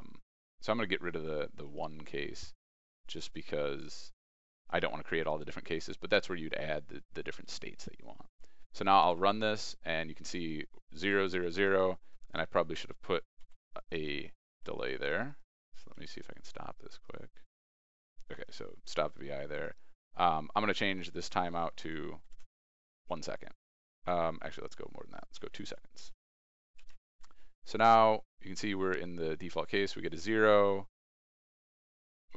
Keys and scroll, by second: 1.9 ctrl+b, 7.7 ctrl+e, 8.8 ctrl+r, 25.3 ctrl+e.